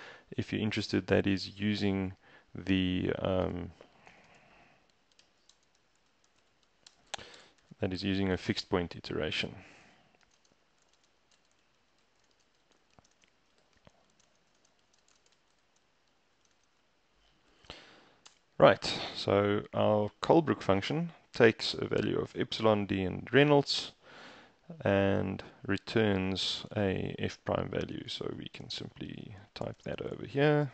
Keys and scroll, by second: 3.5 Return, 4.2-16.4 typing, 18.1-18.9 typing, 19.2 shift+Return, 27.8-30.7 typing.